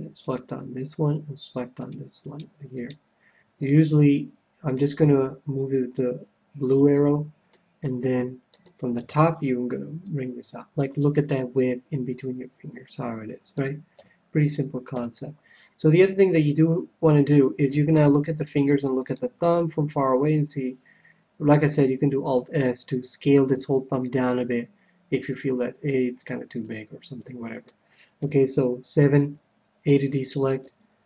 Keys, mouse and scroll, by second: 0.3-2.0 right drag, 2.1-4.4 right drag, 3.6-5.3 middle drag, 5.5-7.2 drag, 6.9-10.3 middle drag, 9.0 KP_7, 10.0-11.7 drag, 11.3-13.0 middle drag, 13.9 a, 14.8 KP_7, 15.4-21.2 middle drag, 24.0-25.7 middle drag, 26.1-26.6 scroll down 1, 26.6-28.1 middle drag, 28.1 KP_7, 29.1 scroll down 1, 29.3-31.0 middle drag, 29.8 a, 30.6 a.